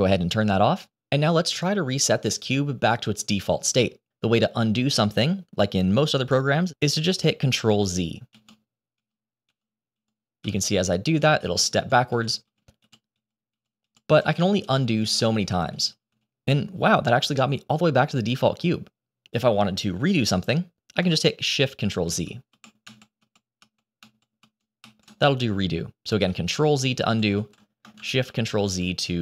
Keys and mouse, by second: 8.3 ctrl+z, 8.9 ctrl+z, 9.4 ctrl+z, 9.8 ctrl+z, 10.3 ctrl+z, 10.9 ctrl+z, 11.3 ctrl+z, 11.7 ctrl+z, 12.0 ctrl+z, 12.3 ctrl+z, 12.7 ctrl+z, 13.0 ctrl+z, 13.4 ctrl+z, 13.7 ctrl+z, 14.0 ctrl+z, 14.3 ctrl+z, 14.5 ctrl+z, 14.8 ctrl+z, 15.0 ctrl+z, 15.2 ctrl+z, 15.4 ctrl+z, 15.6 ctrl+z, 15.8 ctrl+z, 16.0 ctrl+z, 16.2 ctrl+z, 16.4 ctrl+z, 16.6 ctrl+z, 16.8 ctrl+z, 17.0 ctrl+z, 17.2 ctrl+z, 17.5 ctrl+z, 17.8 ctrl+z, 18.0 ctrl+z, 18.2 ctrl+z, 22.0 ctrl+shift+z, 22.4 ctrl+shift+z, 22.7 ctrl+shift+z, 23.1 ctrl+shift+z, 23.5 ctrl+shift+z, 23.9 ctrl+shift+z, 24.3 ctrl+shift+z, 24.7 ctrl+shift+z, 26.6 ctrl+z, 27.0 ctrl+z, 27.3 ctrl+z, 28.2 ctrl+shift+z, 28.6 ctrl+shift+z, 29.0 ctrl+shift+z.